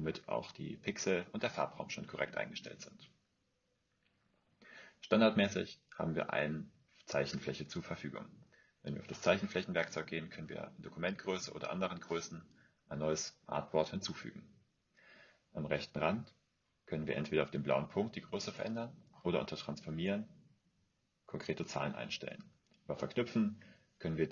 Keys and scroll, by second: 19.6-20.7 typing, 22.2-23.3 typing.